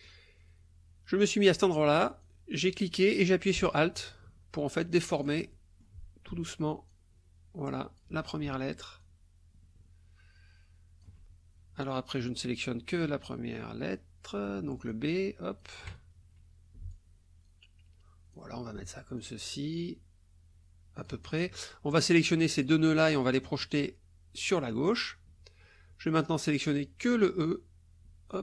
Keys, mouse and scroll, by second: 2.2-5.4 drag, 5.5 alt+click, 6.9-8.2 alt+drag, 9.0-11.2 alt+drag, 11.8-14.6 drag, 14.9 shift+click, 16.9-18.5 alt+drag, 19.2-21.5 alt+drag, 22.0 click, 23.5-24.7 drag, 26.2-28.4 drag.